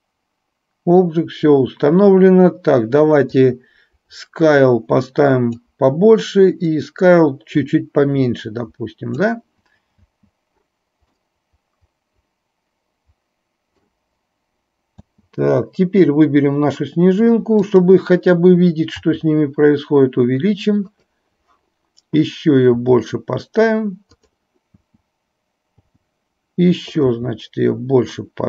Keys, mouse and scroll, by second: 3.4-5.8 drag, 6.8-9.4 drag, 10.3 space, 11.4-14.0 middle drag, 15.0 space, 17.8 drag, 24.9 space, 27.2 s.